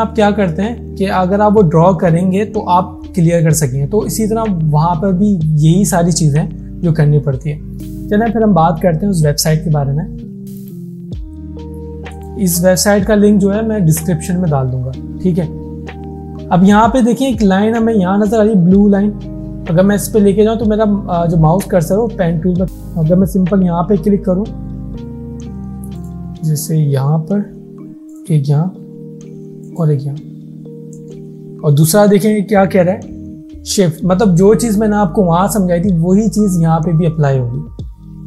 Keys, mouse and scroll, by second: 10.6 click, 22.6 click, 24.0 ctrl+z, 24.6-24.9 alt+scroll up 1, 26.0 click.